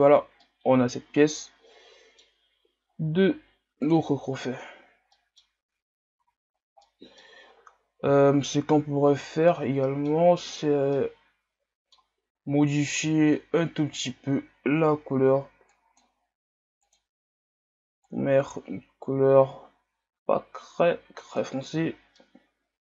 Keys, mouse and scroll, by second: 0.4-4.1 middle drag, 4.1-5.1 drag, 5.1 middle click, 5.6 a, 6.2 a, 6.5 scroll down 3, 6.8-7.5 middle drag, 7.5 scroll up 1, 8.3 shift+scroll down 1, 8.5-10.7 middle drag, 10.7-11.0 scroll down 1, 11.0-13.1 middle drag, 13.1 drag, 14.0-15.8 right drag, 15.8-18.1 drag, 21.8-22.2 scroll down 2, 22.2-22.9 middle drag.